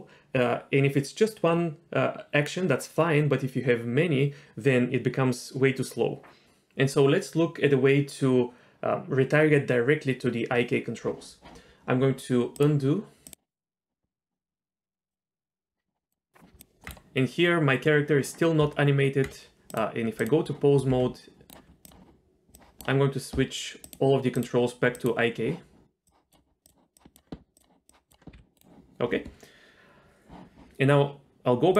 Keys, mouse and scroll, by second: 12.5-15.5 drag, 16.1 click, 16.6 click, 16.8 Tab, 16.8 middle click, 18.6 Tab, 19.7 click, 20.2 click, 20.9 g, 21.8 click, 22.5 click, 23.8 click, 24.9 click, 26.1 click, 26.9 click, 27.5 click, 27.9 click, 28.3 g.